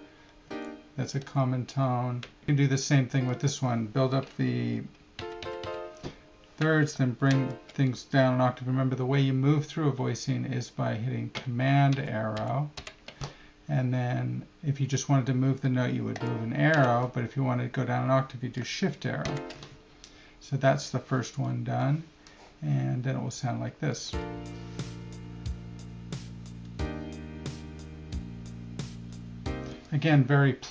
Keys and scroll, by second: 0.4 shift+Down, 1.2 Right, 5.2 F3, 7.3 shift+Down, 11.9 super+Up, 16.1 Down, 16.7 Up, 19.3 shift+Down.